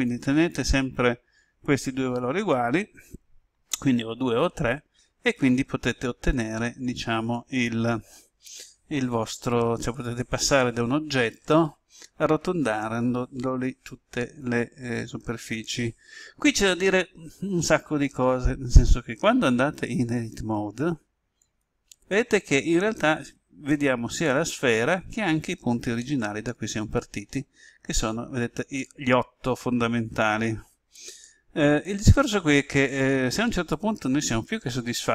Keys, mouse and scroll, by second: 5.2-5.8 scroll up 1, 20.2-22.5 drag, 25.9-27.4 middle drag.